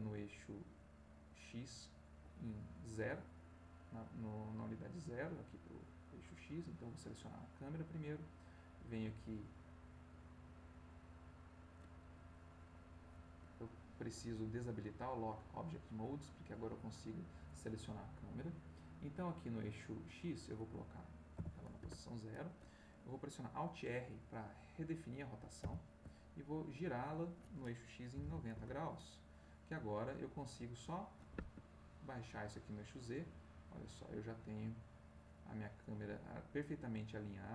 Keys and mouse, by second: 2.5 middle click, 3.3 click, 5.7 click, 7.1 click, 8.4 click, 10.1 click, 13.9 click, 15.5 click, 16.3 click, 20.2 click, 21.3 0, 21.8 Return, 25.6 alt+r, 27.0 click, 28.1 9, 28.2 0, 28.5 Return, 30.7-31.7 drag, 31.3 Escape, 32.0-36.0 drag.